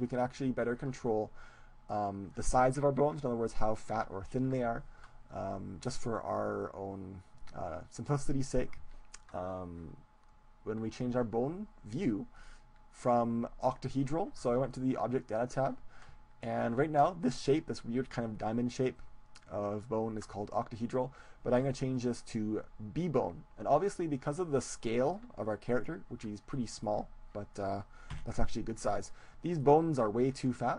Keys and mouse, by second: 1.9-24.3 drag, 24.3-27.1 middle drag, 28.2 KP_1.